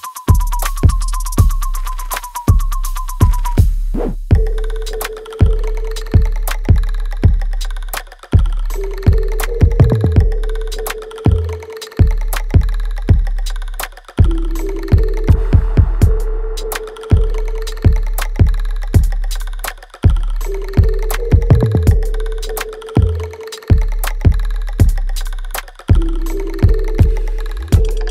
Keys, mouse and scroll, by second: 1.4 click, 6.7 right click, 7.3 click, 7.6 alt+right click, 8.1 alt+click, 10.4 space, 12.6 alt+right click, 13.0 alt+middle click, 13.7 right click, 14.4 alt+middle click, 15.1-16.9 drag, 16.9 w, 17.5 click, 19.4 r, 20.0 click, 20.8 space, 21.6 alt+click, 22.9 alt+right click, 23.2 alt+middle click, 24.5 click.